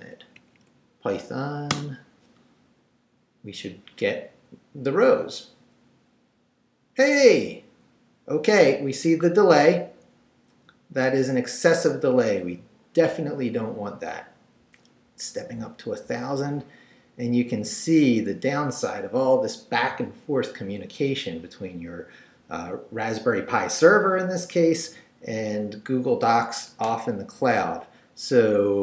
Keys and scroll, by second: 0.0 shift+Up, 1.7 Return.